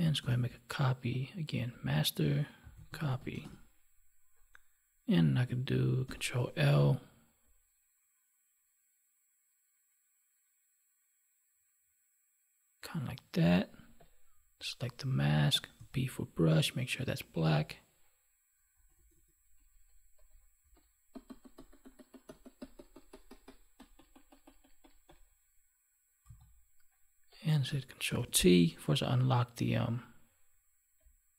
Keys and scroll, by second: 0.1 ctrl+j, 6.0 ctrl+l, 28.0 ctrl+t.